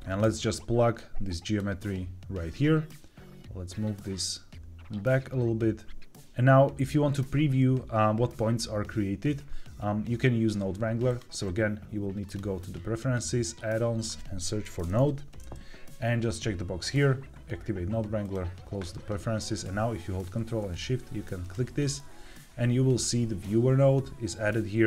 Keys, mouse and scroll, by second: 0.1-1.5 drag, 2.9-6.1 drag, 6.1 middle click, 11.0-12.3 drag, 21.3 ctrl+shift+click.